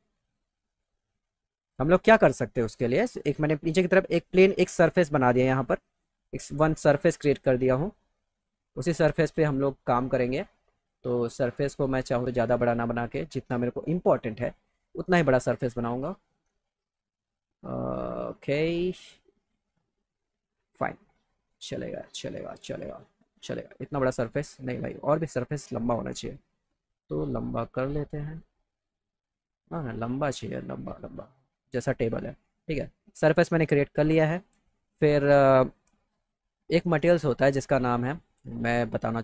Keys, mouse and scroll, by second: 0.5-2.8 drag, 5.8 middle click, 6.3 middle click, 10.2 click, 11.5-13.9 drag, 14.8 click, 16.8-17.8 drag, 22.8 click, 26.6-27.8 drag, 28.8 click, 30.3-31.9 drag, 36.2 click.